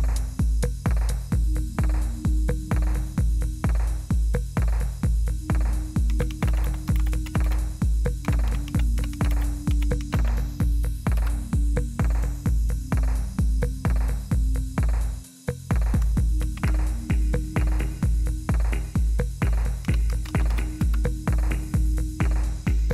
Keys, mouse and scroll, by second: 0.0 click, 3.0 click, 4.9 click, 5.8-10.6 typing, 11.1 Return, 12.7 typing, 15.1 click, 16.4 ctrl+c, 19.6-21.0 typing.